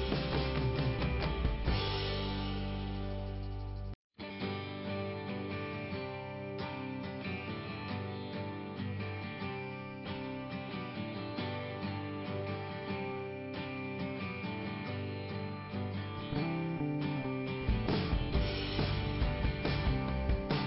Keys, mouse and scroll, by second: 2.5 click, 5.9 click, 7.9 click, 11.4 click, 12.3 i, 13.2 scroll down 2, 15.9 click, 16.9 scroll down 2, 18.8 click.